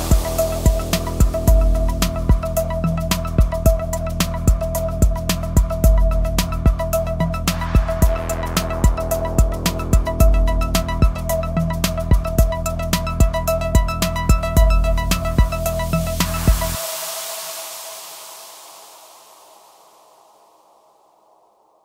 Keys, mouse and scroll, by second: 0.1 ctrl+shift+r, 0.7-21.8 drag.